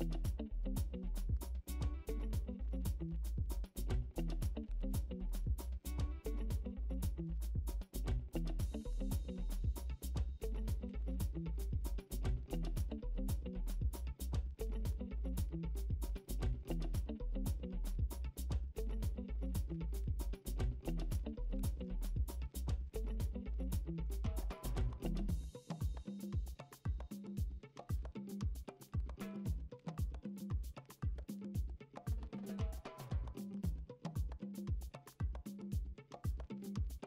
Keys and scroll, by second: 0.2 m, 0.5 ctrl+u, 4.6 ctrl+d, 4.7-8.1 typing, 6.4 Delete, 8.5 ctrl+d, 9.6 typing, 11.6 ctrl+d, 11.7-12.8 typing, 13.4 ctrl+d, 14.6 m, 14.9 ctrl+u, 17.1-20.3 typing, 17.9 ctrl+d, 18.2 ctrl+d, 21.5-23.0 ctrl+d, 23.0 ctrl+z, 24.9 ctrl+t, 25.5 ctrl+t, 26.4 Return, 27.1 ctrl+d, 27.6 e, 28.5 b, 29.5-31.6 typing, 30.8 ctrl+d, 32.8 ctrl+d, 33.0 ctrl+d, 33.0-35.2 typing, 34.3 ctrl+alt+z, 34.4 ctrl+alt+z, 35.2 ctrl+d, 36.5 ctrl+d, 36.8-37.0 typing.